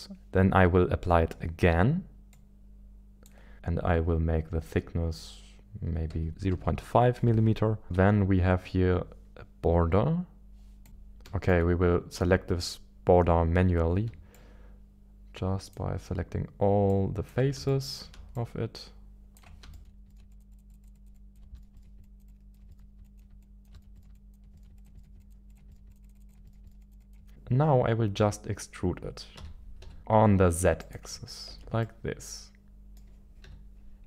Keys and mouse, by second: 3.5 click, 7.8 shift+middle click, 10.9 a, 11.2 shift+middle click, 14.3 shift+click, 16.9 shift+click, 17.9 shift+middle click, 18.4 shift+click, 19.7 shift+middle click, 20.3 shift+click, 20.5 shift+click, 20.9 shift+click, 21.1 shift+click, 21.5 shift+middle click, 22.1 shift+click, 22.6 shift+middle click, 23.0 shift+click, 23.4 shift+click, 23.9 shift+middle click, 24.1 shift+click, 24.7 shift+click, 25.3 shift+click, 25.6 shift+middle click, 26.0 shift+click, 26.2 shift+click, 26.4 shift+middle click, 26.6 shift+middle click, 26.8 shift+click, 27.3 KP_1, 29.3 e, 29.8 z, 30.8 ctrl+click, 31.5 Tab, 31.8-33.1 middle drag, 33.4 Tab, 33.4 z.